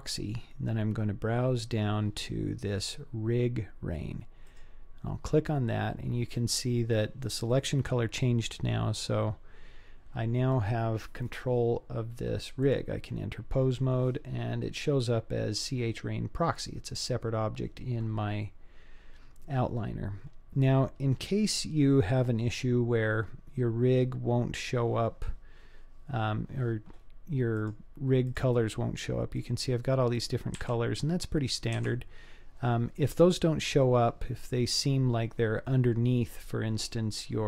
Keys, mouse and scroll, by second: 12.7-14.0 drag, 27.6-28.4 drag, 29.4 click, 30.1 click, 30.5 g.